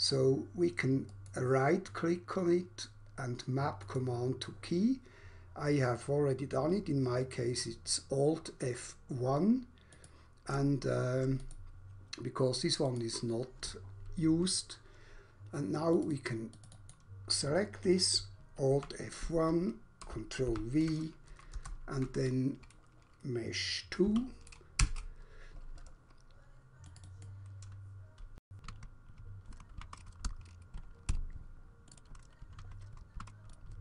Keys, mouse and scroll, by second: 1.1 right click, 3.9 click, 9.9 click, 11.4 click, 12.9 click, 15.9 click, 16.2 double click, 16.6 double click, 16.7 double click, 16.9 double click, 18.7 alt+F1, 20.4 ctrl+v, 21.3 BackSpace, 23.9 2, 24.6 Return, 26.9 click, 27.1 click, 27.2 double click, 28.9 alt+F1, 29.8 ctrl+v, 30.2 BackSpace, 31.1 Return, 31.1 3, 31.9 click, 32.0 double click, 32.5 alt+F1, 33.2 ctrl+v, 33.5 click.